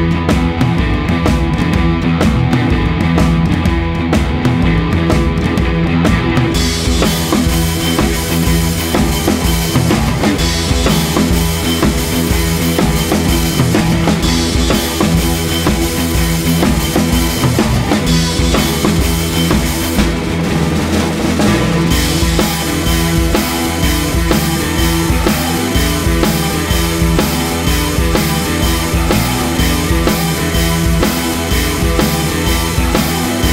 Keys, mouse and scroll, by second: 0.0-2.9 typing, 0.4 alt+click, 0.7 middle click, 0.9 scroll up 2, 1.3 scroll down 1, 1.4 middle click, 1.8 middle click, 2.0 Tab, 2.1 middle click, 2.6 ctrl+click, 3.0 click, 3.2 ctrl+z, 3.9 click, 4.1 ctrl+z, 4.1-7.0 typing, 4.6 click, 5.0 click, 6.0 alt+click, 6.2 ctrl+z, 6.4 scroll up 3, 6.6 shift+click, 6.8 shift+click, 7.2 alt+m, 7.5 ctrl+z, 7.6 alt+m, 8.1 1, 8.1 click, 8.2 g, 8.4 middle click, 8.5 g, 8.7 g, 9.1 middle click, 9.1 scroll up 1, 9.2 alt+click, 9.5 middle click, 9.9 click, 10.0-15.5 typing, 10.2 Tab, 10.3-10.6 middle drag, 10.7 shift+middle click, 10.9 scroll up 2, 11.0 Tab, 11.1 shift+middle click, 13.2 shift+middle click, 13.5 scroll up 2, 13.7 shift+middle click, 14.2 click, 14.6 click, 15.4 click, 16.2 click, 16.2 scroll up 2, 16.6 shift+click, 16.6-17.9 typing, 17.2 click, 17.5 click, 18.3 scroll down 3, 18.3 shift+middle click, 18.6 scroll up 2, 18.7 shift+middle click, 18.9-19.4 scroll down 1, 20.0-25.3 typing, 20.0-20.5 scroll up 2, 20.1 shift+middle click, 21.3 ctrl+z, 21.5 ctrl+z, 23.7 shift+middle click, 23.7 scroll up 1, 23.7 click, 24.2 shift+middle click, 24.3 scroll down 2, 24.4 shift+middle click, 24.5 scroll up 3, 24.6 shift+middle click, 24.8 click, 24.9 scroll down 2, 24.9 middle click, 26.3-29.0 typing, 26.9 shift+middle click, 27.8 scroll up 2, 28.4 middle click, 28.9-29.2 scroll up 2, 29.2 click, 30.1 click, 30.2-33.5 typing, 31.0 shift+middle click, 31.2 click, 32.0-32.3 scroll down 3, 33.0 shift+middle click, 33.1 scroll up 2, 33.2 scroll down 1, 33.3 scroll up 1.